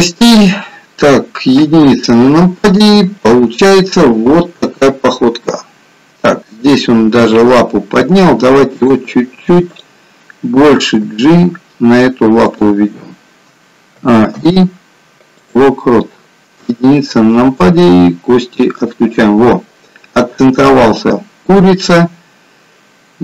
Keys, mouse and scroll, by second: 1.5 KP_1, 7.0 KP_7, 8.7 click, 9.6 click, 11.1 g, 13.9 a, 14.3 i, 16.5 KP_1, 18.7 click, 22.1 click.